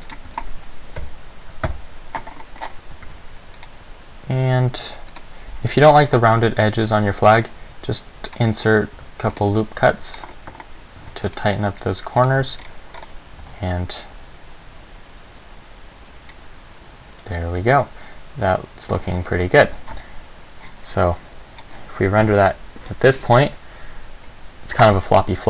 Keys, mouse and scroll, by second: 0.2 right click, 0.5 Tab, 1.2 KP_7, 1.8 KP_1, 2.5-3.7 scroll up 7, 3.2 ctrl+r, 5.4 click, 6.6 ctrl+r, 8.6 click, 9.2 ctrl+r, 10.4 click, 11.2 ctrl+r, 12.4 click, 12.6 Tab, 12.8-13.2 scroll down 3, 13.2-13.8 scroll up 3, 13.6 alt+a, 16.5 scroll down 1, 18.0 scroll down 1, 20.0 Escape, 21.2 click.